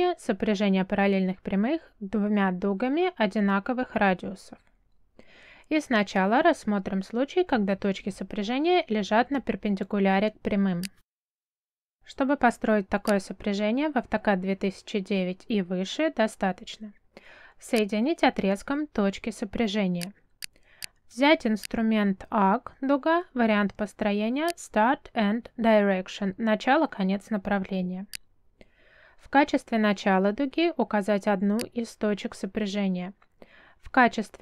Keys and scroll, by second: 15.9 space.